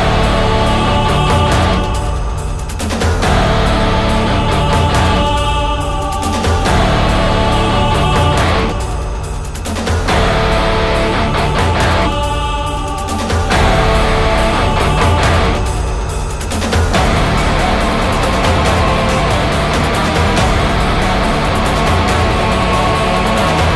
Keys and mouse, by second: 0.0 right click, 0.8 right click, 5.5 right click, 15.8 ctrl+z, 18.0 ctrl+z, 18.6 ctrl+z, 18.8 ctrl+z, 18.9 ctrl+z, 19.2 ctrl+z, 19.5 ctrl+z, 19.7 ctrl+z.